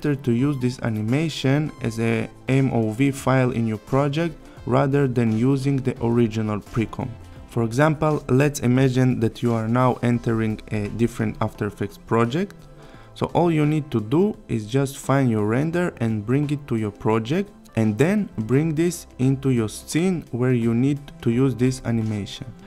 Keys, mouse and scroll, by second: 11.3-11.9 click.